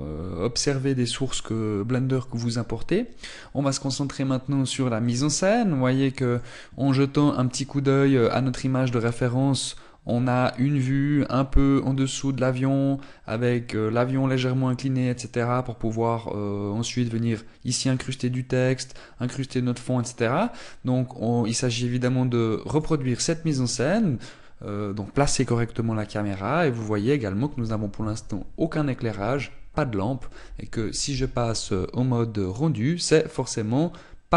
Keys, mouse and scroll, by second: 4.1-4.5 scroll down 2, 5.7 middle click, 33.1 click.